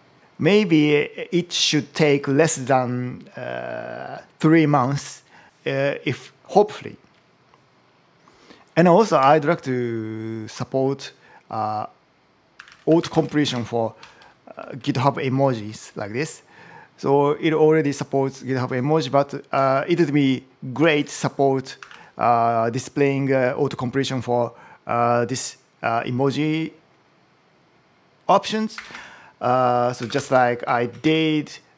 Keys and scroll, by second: 8.9 shift+;, 12.1-13.5 typing, 13.8 Up, 14.0 Right, 20.7-22.3 typing, 28.6 Return, 29.9 shift+., 30.0 space, 30.5 [, 30.8 shift+1.